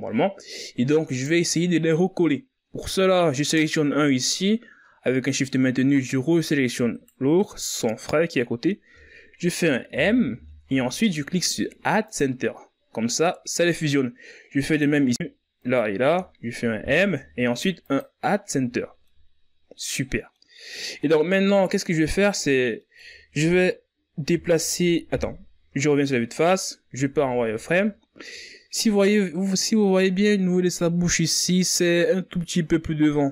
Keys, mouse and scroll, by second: 1.5 right click, 7.3 shift+right click, 10.3 m, 15.0 right click, 17.0 shift+right click, 18.2 m, 20.3 scroll down 2, 20.5-22.0 middle drag, 22.0-22.5 scroll up 1, 22.5 middle click, 23.3-24.3 scroll down 3, 24.3-26.6 middle drag, 26.6 KP_1, 27.6-28.4 scroll up 6, 28.4 z, 29.1-29.9 ctrl+scroll up 3.